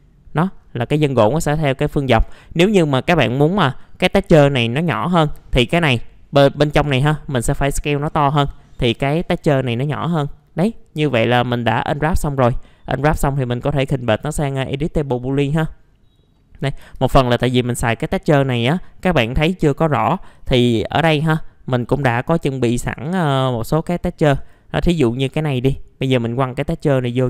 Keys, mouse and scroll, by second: 0.5-1.1 scroll down 1, 1.1 middle click, 2.5-3.8 scroll up 1, 5.2 middle click, 5.5 right click, 6.8-8.7 drag, 8.7-9.5 scroll down 1, 10.7-11.9 middle drag, 12.2 right click, 14.1 click, 16.3 middle click, 16.8 F4, 17.2 middle click, 17.3 scroll down 1, 18.6 click, 22.2-27.2 drag.